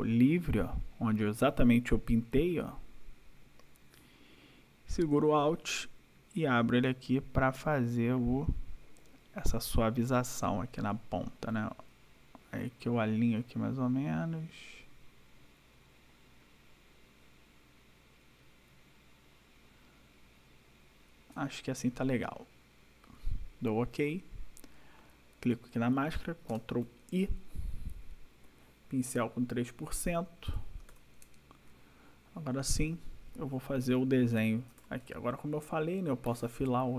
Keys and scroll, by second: 26.5 ctrl+i, 30.5 ctrl+=, 34.4 ctrl+=.